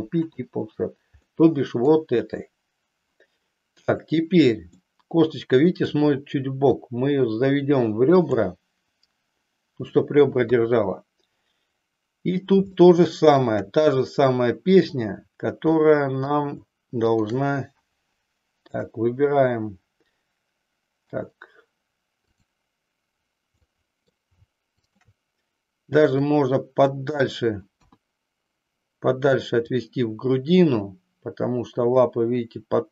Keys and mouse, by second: 1.4 middle click, 4.9-6.0 middle drag, 6.9-8.4 drag, 10.4 KP_3, 12.7 shift+middle click, 14.7 click, 15.7 middle click, 17.3 shift+click, 18.7-21.1 middle drag, 22.3 click, 23.6 middle click, 24.9 shift+click, 26.1-27.2 drag, 27.6 KP_1, 29.7-32.9 drag.